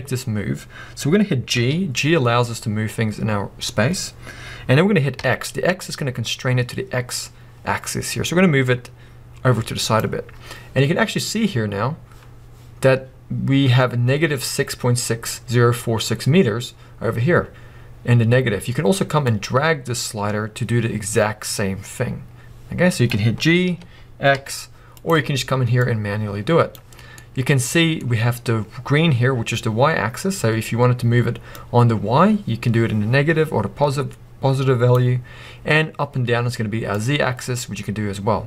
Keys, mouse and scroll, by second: 1.6 g, 5.6-7.7 drag, 7.9-10.0 drag, 19.3-25.0 drag, 23.6 g, 25.0 right click, 25.8-27.2 drag, 26.9 scroll down 2, 27.2-31.5 middle drag, 31.5-38.4 drag.